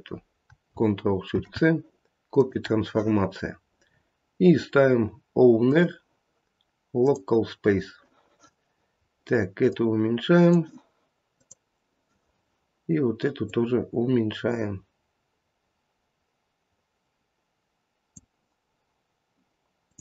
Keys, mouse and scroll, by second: 1.3 ctrl+shift+c, 3.8 scroll down 5, 5.6 click, 8.9 scroll down 3, 9.6 click, 11.3 click, 16.3 click, 19.8 click.